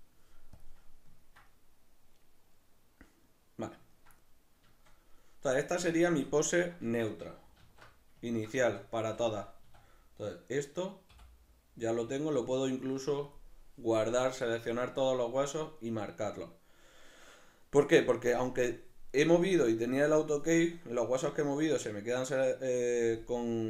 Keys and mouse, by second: 0.8-7.6 middle drag, 5.8 a, 7.6 alt+q, 8.3 ctrl+middle click, 9.0 a, 11.1 i, 11.1 a.